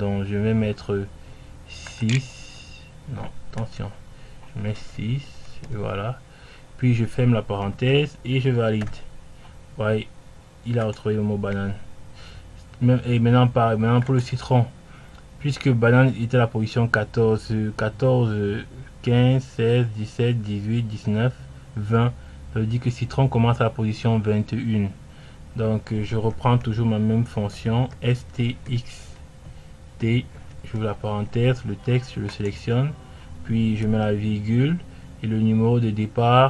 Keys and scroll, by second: 0.0-1.9 typing, 6.1 i.